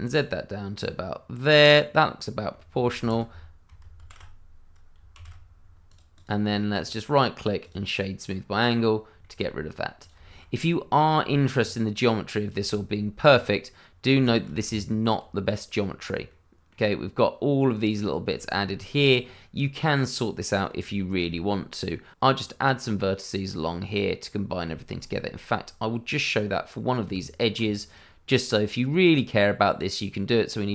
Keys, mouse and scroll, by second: 1.6 click, 2.5 middle click, 3.0 ctrl+z, 3.2 scroll down 1, 4.0 ctrl+shift+z, 5.1 shift+z, 5.5-5.8 scroll down 1, 5.8 click, 6.2 double click, 6.7 right click, 7.6 click, 8.2-8.6 scroll up 1, 8.6 click, 9.2 shift+middle click, 9.2 middle click, 9.6 scroll up 1, 10.0 click, 10.2 shift+middle click, 10.3 middle click, 10.4 scroll up 1, 11.3 shift+middle click, 11.3 middle click, 11.5-12.6 shift+scroll up 2, 12.7 shift+middle click, 12.7 middle click, 13.2 scroll up 1, 13.8 scroll down 1, 14.2 shift+middle click, 14.6 Tab, 16.2 middle click, 17.9-18.3 scroll down 1, 18.3 shift+middle click, 19.2-19.6 scroll down 1, 19.6 middle click, 20.9 shift+middle click, 21.0 middle click, 21.1 shift+middle click, 21.3 scroll up 1, 22.3-23.0 scroll down 1, 24.6 shift+scroll down 1, 24.7 shift+middle click, 24.9 scroll up 1, 26.0 scroll down 1, 26.4 middle click, 27.0 Tab, 27.8 click.